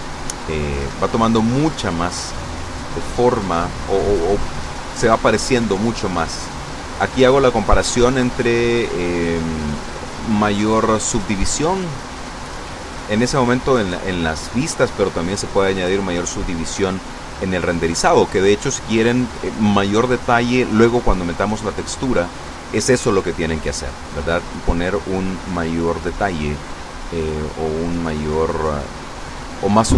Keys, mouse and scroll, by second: 2.5 ctrl+3, 4.8 ctrl+3, 7.7 ctrl+z, 12.9 click, 14.3 scroll down 2.